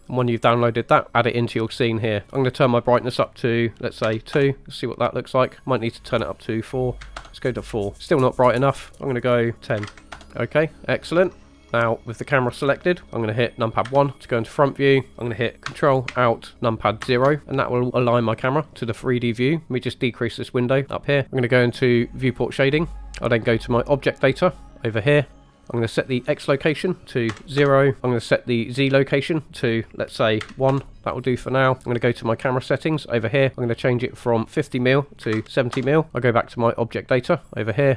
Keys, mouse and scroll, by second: 1.1 middle click, 2.4-4.4 drag, 5.8-7.3 drag, 7.9 middle click, 7.9 scroll up 2, 8.8-10.2 drag, 10.2 middle click, 11.7 click, 13.0 middle click, 14.0 KP_1, 17.1 ctrl+alt+KP_0, 18.2-19.1 scroll down 3, 19.7 click, 25.0 click, 26.2-27.6 drag, 29.3-30.8 drag, 32.8 click, 34.5-35.9 drag, 37.5 click.